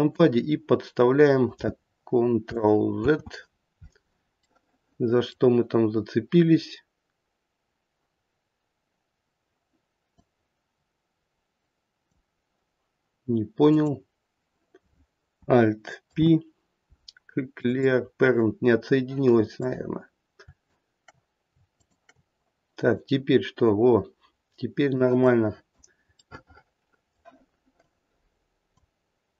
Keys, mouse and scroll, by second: 0.1 click, 2.9 ctrl+z, 4.4 middle click, 10.1 click, 13.7 click, 15.9 alt+p, 17.7 click, 19.5 click, 21.7 shift+click, 22.9 click, 25.2 click, 26.2 middle click, 27.8 click.